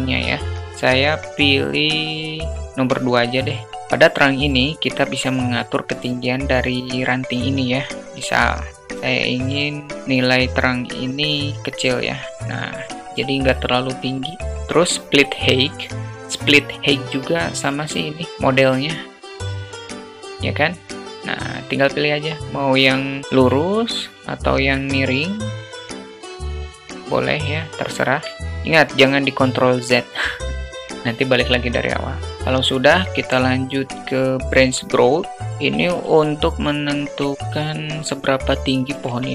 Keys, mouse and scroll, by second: 1.0 click, 1.6 click, 2.7-3.1 drag, 10.5 click, 11.1 click, 15.4 click, 17.1-17.9 alt+middle drag, 18.7-21.8 drag, 22.4-23.2 alt+middle drag, 23.5 alt+middle click, 24.9 click, 25.7 alt+middle click, 26.1 click, 27.6 alt+middle click, 32.3-34.2 drag, 36.5-37.3 shift+middle drag.